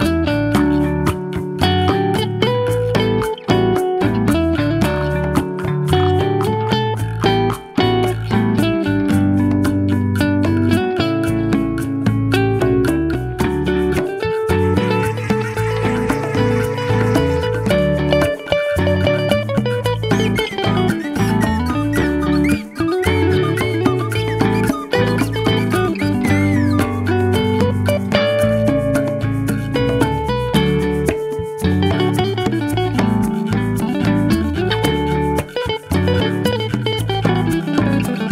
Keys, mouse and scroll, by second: 0.0 click, 3.2-6.9 middle drag, 7.4 scroll down 1, 7.7-8.4 middle drag, 8.7-9.0 scroll down 2, 9.0 middle click, 10.0-10.4 middle drag, 10.6-11.4 shift+middle drag, 11.6-12.4 middle drag, 12.7-13.2 shift+middle drag, 13.1-14.0 shift+scroll up 3, 14.1-14.9 shift+middle drag, 15.3-15.9 middle drag, 16.2-17.1 shift+middle drag, 19.5-20.8 drag, 21.7 click.